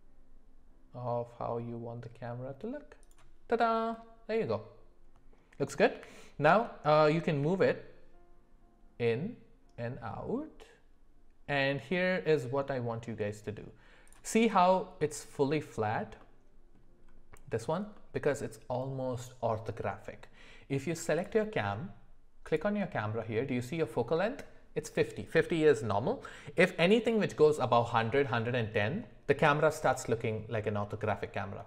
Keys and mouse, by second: 3.9-4.5 middle drag, 5.9 g.